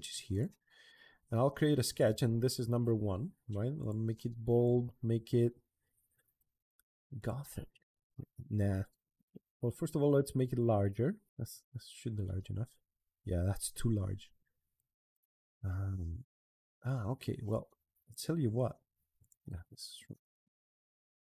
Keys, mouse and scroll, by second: 0.1 click, 1.7 click, 3.6 click, 4.4 click, 7.0 click, 11.2 scroll down 1, 14.5 click, 16.6 Escape, 17.0 Escape, 17.3 click, 18.0 Escape, 19.0 click, 20.5 click.